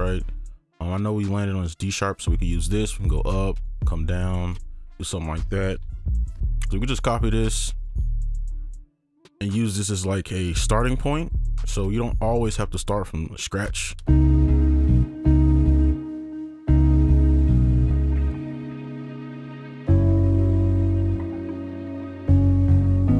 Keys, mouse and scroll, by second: 0.4 ctrl+shift+click, 2.9 ctrl+shift+click, 3.6 ctrl+shift+click, 4.3 ctrl+shift+click, 6.2 ctrl+c, 7.6 right click, 8.1 ctrl+v, 9.4 right click, 14.1 space, 15.0 space, 15.9 space, 16.4 alt+click, 16.7 space, 16.9 right click, 18.0 alt+click, 22.8 alt+click.